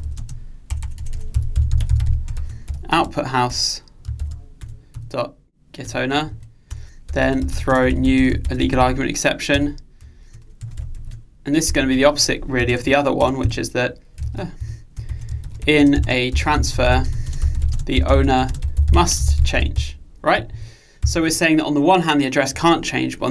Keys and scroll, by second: 3.5 Return, 10.7 Return, 12.7 Delete, 14.3 super+z.